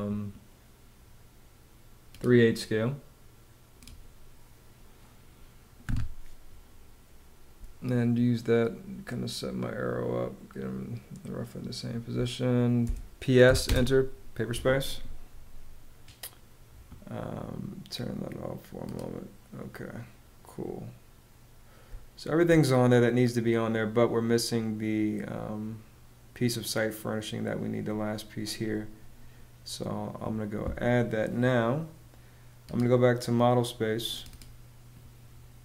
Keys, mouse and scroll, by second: 7.1 space, 12.4 p, 13.0 s, 13.2 space, 14.1 space, 21.4 space.